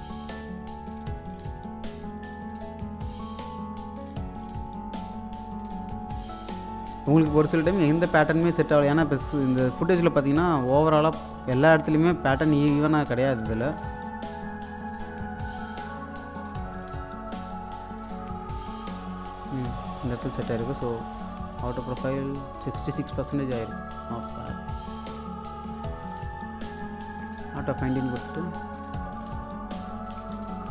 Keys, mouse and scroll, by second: 0.4-2.2 drag, 2.6-9.4 drag, 9.4 scroll down 1, 13.7-21.0 drag, 23.6 click, 27.0 click, 28.5-29.8 scroll up 1, 29.8-30.3 scroll down 1, 30.3 space, 30.6 click.